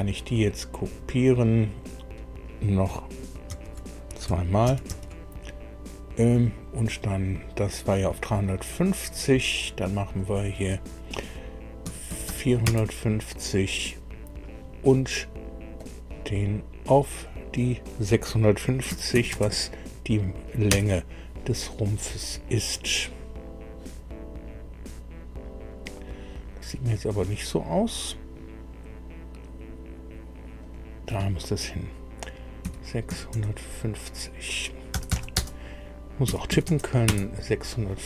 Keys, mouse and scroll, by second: 0.3 click, 0.9 click, 1.8 click, 3.5 ctrl+c, 4.7 ctrl+v, 4.9 ctrl+v, 6.4 click, 7.3 click, 8.7 click, 10.2 click, 11.8 KP_4, 12.1 KP_5, 12.3 KP_0, 12.7 KP_Enter, 15.8 click, 17.3 click, 18.9 KP_6, 19.1 KP_5, 19.3 KP_0, 20.7 KP_Enter, 24.4 scroll down 2, 25.3 scroll up 2, 30.6 click, 32.6 KP_3, 33.1 KP_5, 34.9 BackSpace, 35.1 BackSpace, 36.3 KP_6, 36.5 KP_5, 36.7 KP_0, 37.1 KP_Enter.